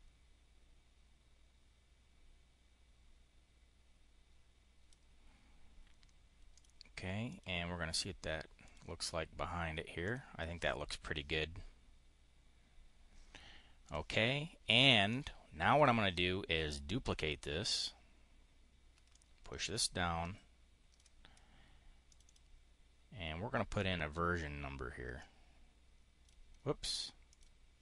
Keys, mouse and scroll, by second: 6.4 click, 7.1 click, 8.5 click, 9.9 click, 13.7 click, 14.9 click, 16.9 click, 19.0 ctrl+click, 21.9 click, 25.1-26.2 drag, 27.2 click, 27.7 click.